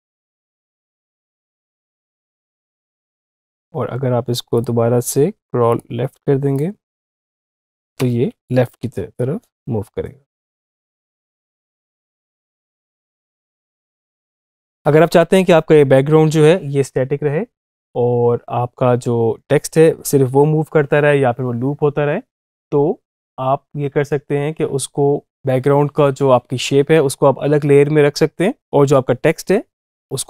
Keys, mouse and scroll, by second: 1.3 space, 1.7 click, 7.8 space, 13.6 space, 14.3 click.